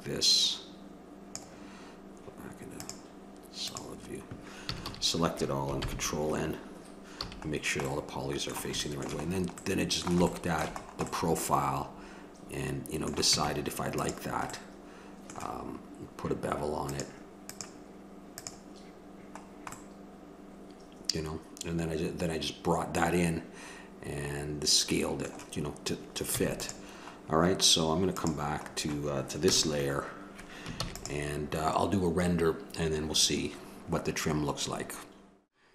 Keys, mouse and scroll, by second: 1.3-3.8 drag, 4.6 a, 4.8 a, 5.7 ctrl+n, 7.2 a, 7.5-9.4 middle drag, 13.3 Tab, 19.8-23.3 middle drag, 28.1-29.7 drag, 29.4 KP_0, 30.7 ctrl+s.